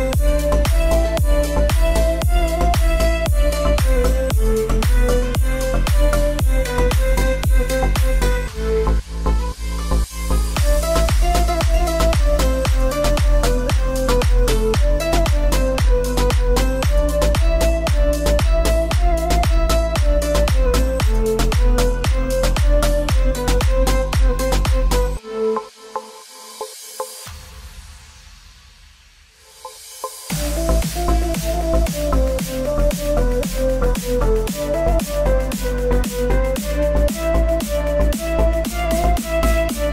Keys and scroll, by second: 8.3-9.5 typing, 10.8-13.3 typing, 31.5-32.9 typing, 34.4-38.0 typing, 39.0 typing.